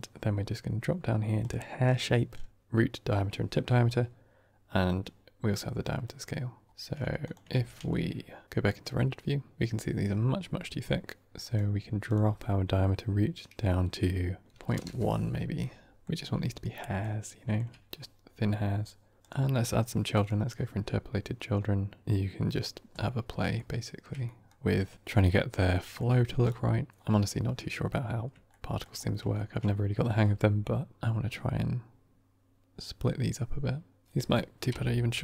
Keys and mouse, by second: 1.3 click, 7.1 click, 7.4 ctrl+s, 11.9-15.5 drag, 16.9-17.5 shift+middle drag, 19.2 click, 22.9 middle drag, 23.5-23.9 shift+middle drag, 24.1 middle drag, 25.7 middle click, 27.5-27.8 middle drag, 28.5 shift+middle drag, 29.3 shift+middle click, 30.8-35.2 shift+drag.